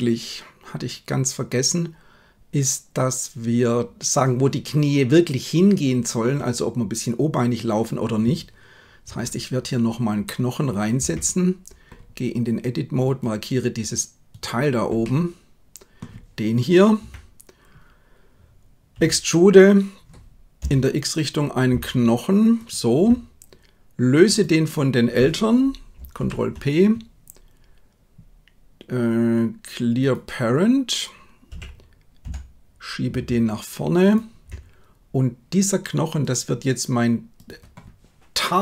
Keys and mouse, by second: 9.1 KP_1, 11.0 Tab, 15.1 middle click, 16.9 KP_1, 19.0 e, 24.3 right click, 26.1 alt+p, 31.5 g, 37.4-38.6 drag.